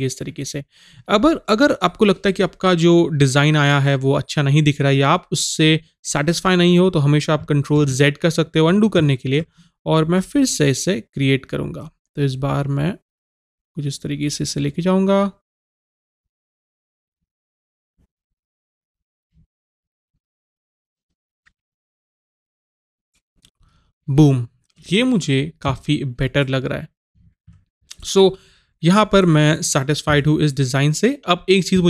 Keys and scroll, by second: 27.5 v.